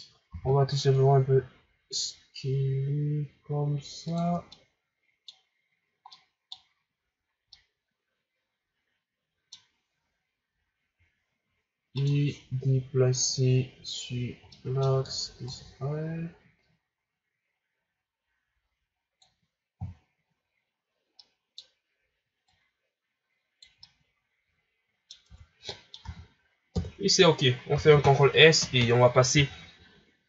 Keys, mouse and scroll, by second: 0.3 s, 4.3 scroll down 2, 4.5-10.5 middle drag, 11.9-15.4 middle drag, 15.4-18.4 drag, 19.7 KP_1, 21.2-22.4 middle drag, 22.4-23.8 drag, 23.8-25.3 middle drag, 25.3 Tab, 25.7-26.0 middle drag, 26.0 a, 26.7 KP_1, 27.7 ctrl+s, 28.4 scroll down 2.